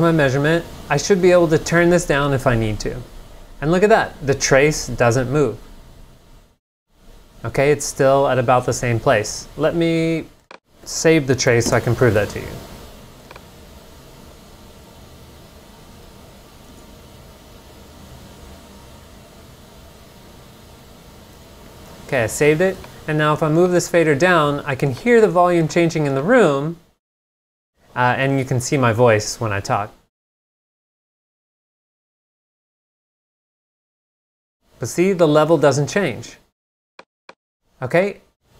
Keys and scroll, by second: 11.5 0, 11.7 Return, 16.0 space, 16.7 Return, 21.4 super+Tab.